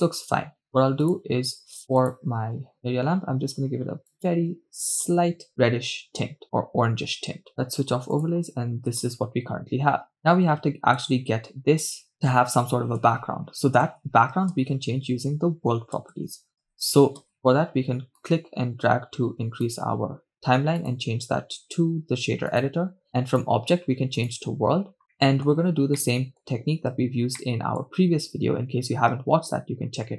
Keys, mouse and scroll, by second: 1.1 shift+space, 2.0 click, 8.3-9.0 drag, 9.2 shift+space, 11.1 shift+space, 13.1 shift+space, 13.9 shift+space, 14.7 shift+space, 16.2 shift+space, 16.8 shift+space, 18.1 shift+space, 18.7-19.8 drag, 20.9-23.1 drag, 23.4-24.5 drag, 25.1 scroll up 3, 25.4 middle click, 25.9-26.5 scroll up 1, 26.5 middle click, 27.5-27.9 scroll up 1, 27.9 middle click.